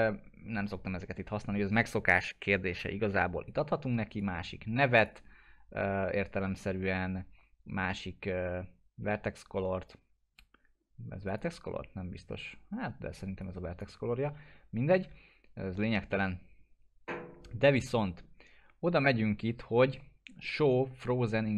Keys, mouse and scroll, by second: 4.2-5.3 click, 11.3-14.0 drag.